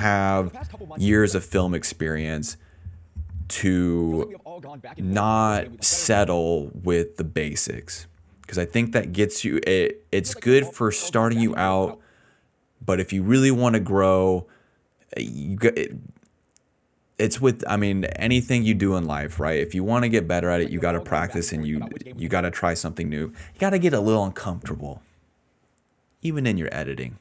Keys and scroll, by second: 0.0-3.9 typing, 5.2 s, 6.0 space, 10.0 space, 10.6 space, 10.9 space, 11.8 space, 13.2 s, 14.3 d, 18.5 ctrl+a, 20.4 space, 22.5 space.